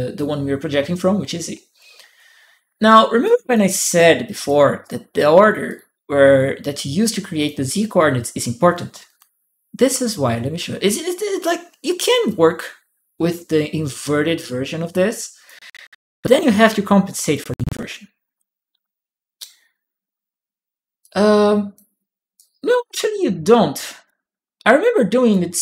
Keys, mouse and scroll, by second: 3.0 click, 3.0 right click, 3.6-4.9 drag, 5.4 click, 5.6 p, 7.1 click, 12.0-15.2 drag, 15.9-17.1 drag, 20.8 click, 22.1-23.8 drag, 22.2 right click, 25.1 click.